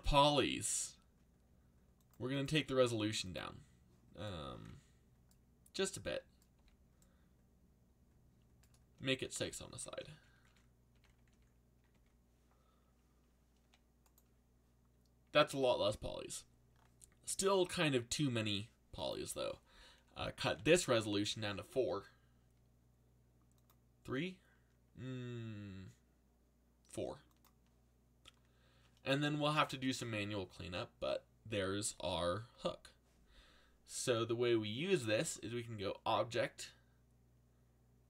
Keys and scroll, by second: 6.5 z, 8.9 z, 13.6 g, 20.5 4, 20.7 Return.